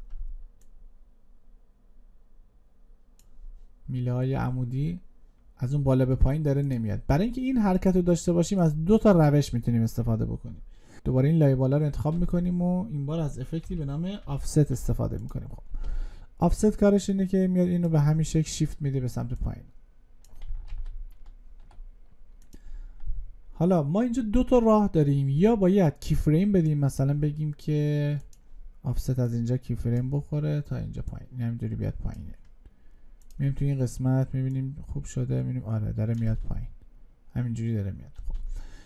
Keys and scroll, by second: 12.0 ctrl+space, 20.5 ctrl+z.